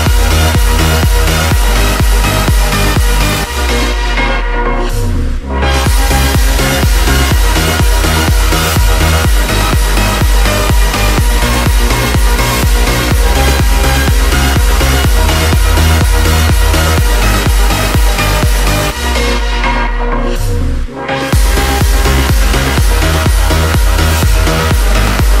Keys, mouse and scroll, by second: 7.9 click, 19.5 F9, 22.9 Up.